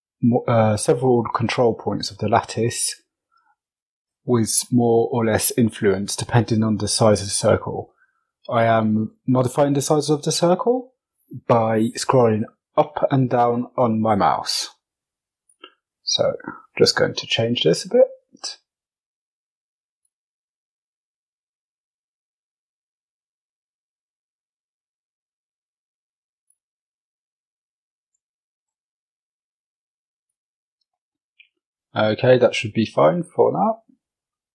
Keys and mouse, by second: 16.5 click, 16.9 shift+click, 17.5 f, 18.4 g, 20.4 click, 20.8 shift+click, 21.4 g, 23.6 click, 24.0 shift+click, 24.5 g, 27.0 click, 27.4 shift+right click, 27.8 g, 30.4 Tab, 31.0-32.8 middle drag.